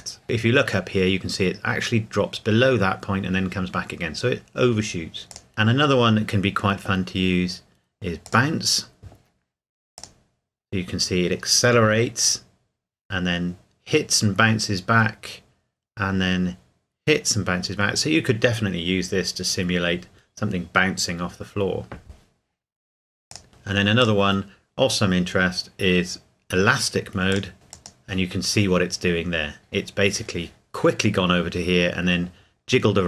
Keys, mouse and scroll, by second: 5.3 click, 8.2 click, 23.3 click, 27.3 click.